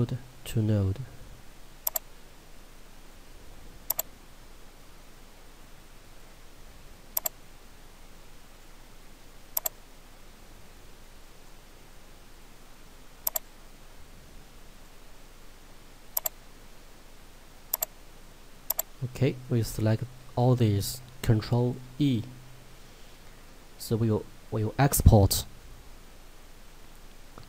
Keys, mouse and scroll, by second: 16.9 scroll down 1, 17.8 click, 21.8 ctrl+e.